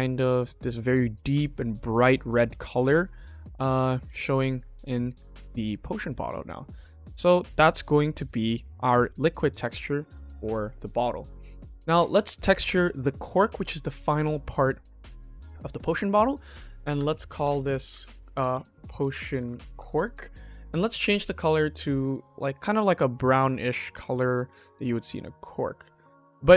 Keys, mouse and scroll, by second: 1.2 click, 2.0 shift+middle click, 2.6-2.9 ctrl+middle drag, 4.0 ctrl+s, 4.4 ctrl+middle click, 5.2-5.6 shift+middle drag, 6.5 KP_1, 7.6-8.1 middle drag, 12.1 click, 12.6 ctrl+s, 15.4 click, 15.9 click, 17.4 BackSpace, 20.8 click, 26.0 click.